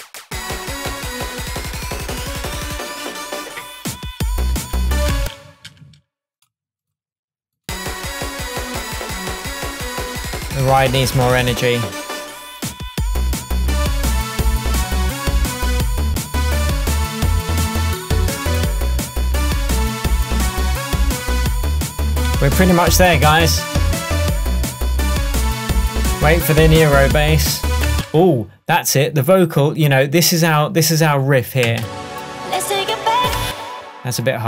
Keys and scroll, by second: 1.1 shift+Tab, 5.2 space, 22.4 super+s, 28.0 space, 31.8 space, 33.5 space.